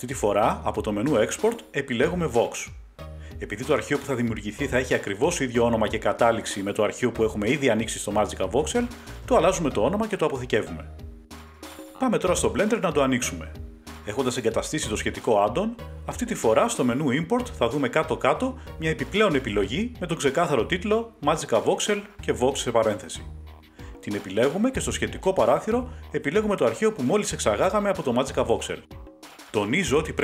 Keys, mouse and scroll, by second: 1.9 click, 5.1 click, 6.2 Right, 6.9 typing, 10.1-11.3 typing, 10.8 click, 11.5 Page_Up, 11.5-15.7 drag, 18.3 click, 22.3 click, 24.4 click, 26.6 click.